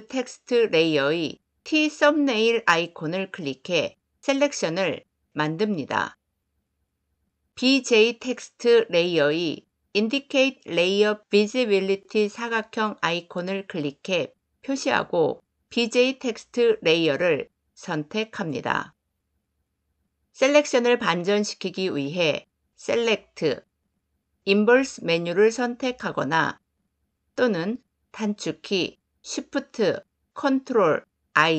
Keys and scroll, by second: 22.8 ctrl+shift+i.